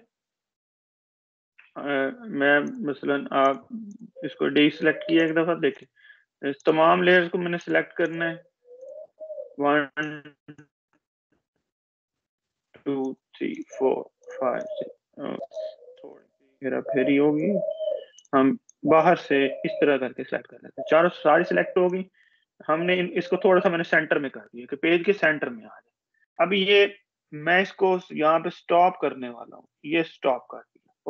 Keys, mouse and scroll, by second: 1.9 Escape, 2.8 click, 12.4 shift+click, 16.7 click, 17.5-17.9 click, 18.3-20.3 drag.